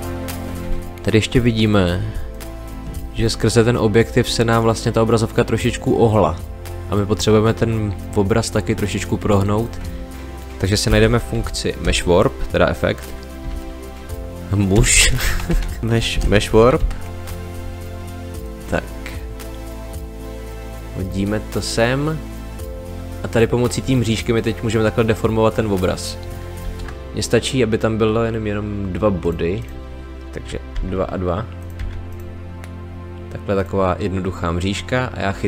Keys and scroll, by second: 10.8 m, 11.8 space, 13.4 w, 14.7 BackSpace, 15.8-16.6 typing, 26.6 ctrl+z, 30.7 2.